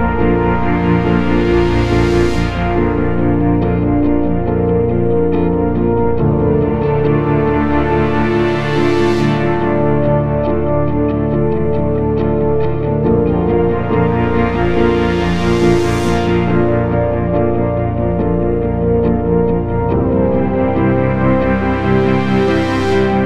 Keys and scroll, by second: 4.2 F8, 4.6 F9, 11.7 ctrl+d, 14.8 t, 15.0 Return, 15.8 h, 16.3 Return, 19.2 ctrl+d, 21.7 ctrl+d, 23.1 p.